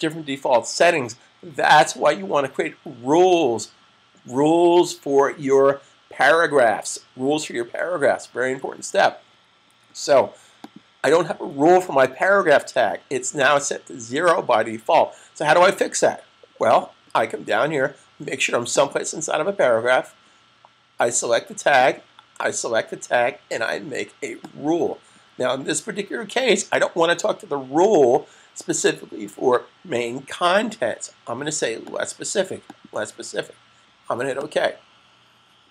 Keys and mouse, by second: 10.3 click, 18.7 click, 21.6 click, 31.8 click.